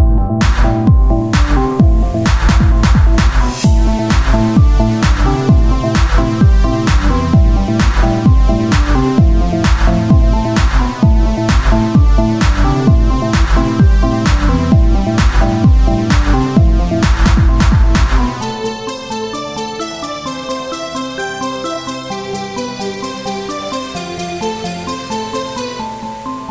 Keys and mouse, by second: 0.0-1.8 typing, 6.8 Tab, 9.5 KP_1, 9.9-13.2 z, 13.8 click, 14.0 Tab, 14.5 ctrl+r, 15.5 s, 17.5 ctrl+b, 20.0 z, 20.5 z, 21.2 e, 24.2 ctrl+Tab, 25.8 x.